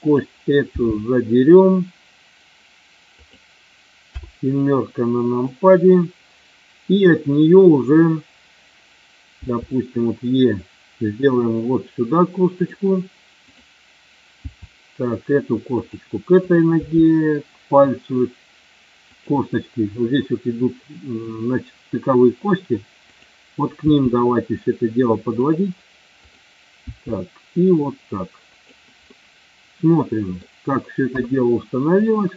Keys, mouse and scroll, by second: 0.7 g, 3.0 click, 4.0 KP_7, 9.3 e, 12.6 click, 13.4 click, 14.4 e, 15.7 click, 16.4 click, 16.8 e, 23.1 click, 23.8 e, 25.3 click, 26.1 click, 26.8 e, 28.5 click, 29.1-30.3 middle drag, 31.1 KP_3, 31.9 click.